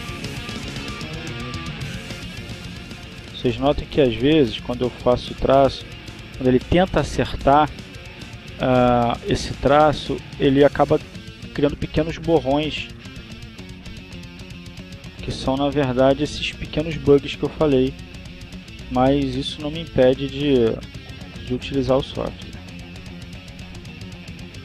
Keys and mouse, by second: 1.1 ctrl+z, 1.7 click, 3.2 click, 5.2-7.8 drag, 9.9 ctrl+z, 10.5-11.7 drag, 12.5 ctrl+z, 12.9-13.9 ctrl+drag, 14.4 ctrl+z, 14.9-15.9 ctrl+drag, 16.0-17.2 drag, 23.7-24.6 drag.